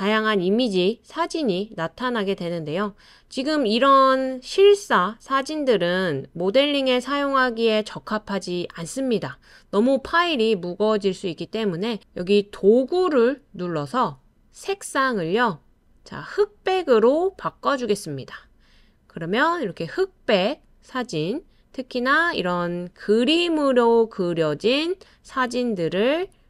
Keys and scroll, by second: 13.0 typing, 23.7-24.4 typing.